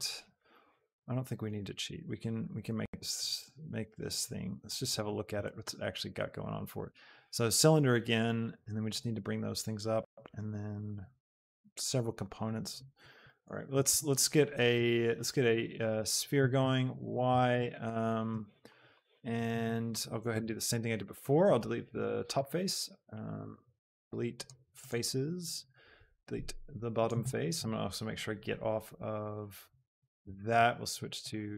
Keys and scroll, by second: 13.9 a, 16.5 y, 20.5 shift+Tab, 23.4 super+x, 26.4 x.